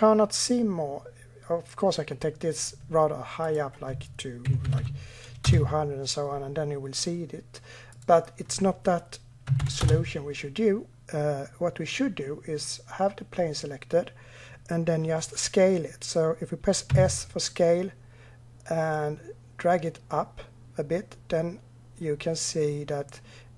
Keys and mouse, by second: 3.3-6.2 drag, 4.6 0, 8.0-10.8 drag, 16.7 s.